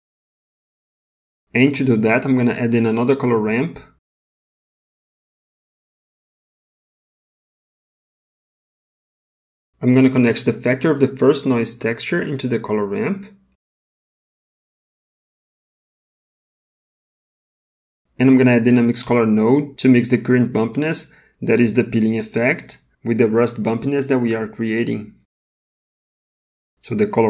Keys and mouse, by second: 1.6 middle click, 2.8 middle click, 3.8 shift+a, 10.2 middle click, 12.0 middle click, 13.9-17.0 drag, 17.3 middle click, 18.2 middle click, 19.1 middle click, 21.2 shift+a.